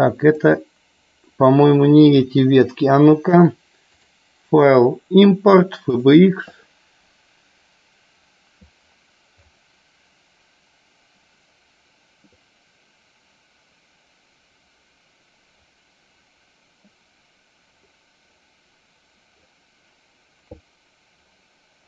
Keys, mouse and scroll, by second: 2.4 Delete, 4.1-6.3 drag.